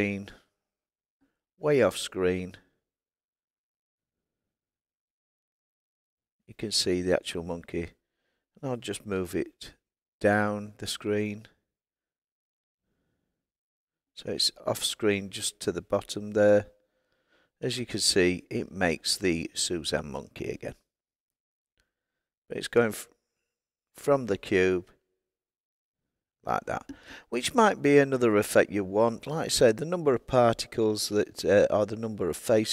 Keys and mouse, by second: 1.1 click, 9.1 g, 16.2 click.